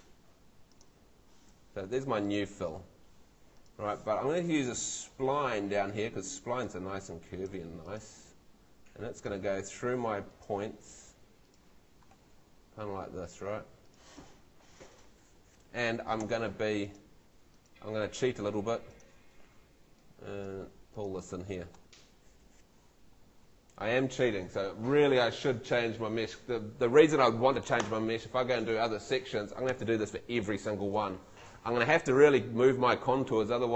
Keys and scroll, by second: 1.6 Escape, 16.2 Escape.